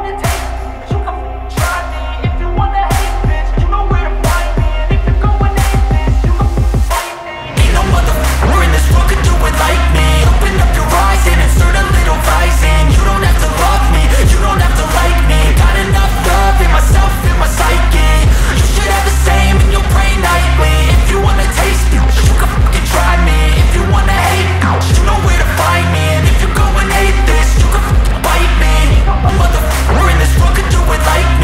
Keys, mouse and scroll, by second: 0.3 click, 2.7 scroll down 1, 3.2 scroll up 1, 5.4 scroll, 5.5 click, 8.2-9.8 scroll down 1, 9.8-10.5 scroll up 1, 10.5 click, 11.3 scroll down 1, 11.5 ctrl+z, 12.4 click, 14.2-15.0 scroll up 1, 15.0-23.1 drag, 23.1-24.6 scroll up 1, 24.6 click, 25.6 scroll down 1, 26.1-27.1 scroll up 1, 27.1-29.1 drag, 29.6-30.0 scroll down 1, 30.0-31.0 scroll up 1, 31.0 click.